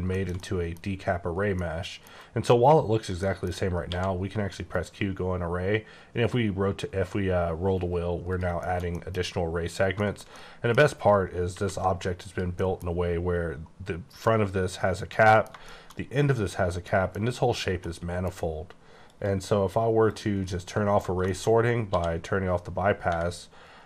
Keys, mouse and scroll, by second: 0.1 shift+middle click, 0.4 double middle click, 1.5 middle click, 2.0 scroll down 1, 3.1 middle click, 3.9 q, 4.6 click, 5.1-5.9 scroll up 5, 5.9 scroll down 3, 6.2-7.3 scroll up 6, 7.3 scroll down 2, 7.7-8.0 scroll up 3, 8.2 click, 8.5 shift+middle click, 9.9 shift+scroll up 2, 10.0 shift+middle click, 11.5 alt+v, 12.2 click, 12.6 middle click, 15.3 middle click, 16.0-16.8 scroll up 1, 16.8 middle click, 17.5 scroll down 3, 17.7 middle click, 19.1 click, 20.0 click, 20.5 middle click, 21.3 middle click, 21.5-21.9 scroll up 4, 21.9 d.